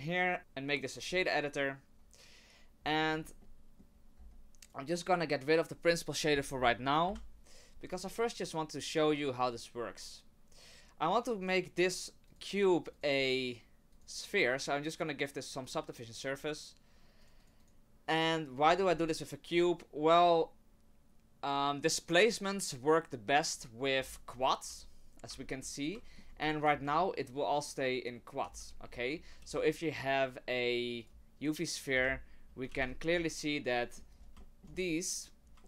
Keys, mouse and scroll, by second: 0.4 ctrl+z, 0.4 click, 2.8-3.9 scroll up 10, 3.4 middle click, 3.9-4.6 scroll down 2, 4.2-5.0 scroll up 2, 4.6 click, 5.0 click, 5.5 click, 7.3 Delete, 12.3 click, 13.0 click, 15.6 click, 15.9 click, 17.2 click, 17.4 click, 17.6 click, 18.6-19.5 scroll up 5, 19.5-20.6 scroll down 1, 20.6-22.0 scroll down 1, 24.0-24.7 scroll up 5, 24.7 Tab, 25.3 Tab, 26.0 shift+middle click, 26.3 scroll up 2, 26.6 z, 28.4 z, 28.8-29.4 scroll down 6, 29.4 shift+a, 31.9 h, 32.9 ctrl+z, 33.1 Tab, 33.8 middle click, 34.1-35.0 scroll up 7, 34.4 shift+middle click, 35.1 right click, 35.4 scroll down 2, 35.6 shift+middle click.